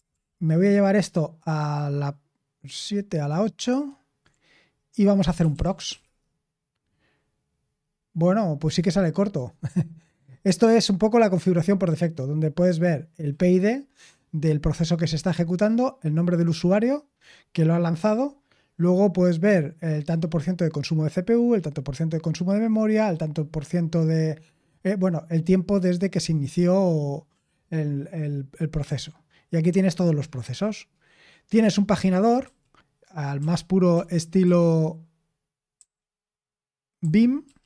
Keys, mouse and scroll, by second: 0.1 super+l, 3.6 shift+super+9, 5.1-6.4 typing, 32.4 d, 33.3 d, 34.4 typing, 35.7-37.6 typing.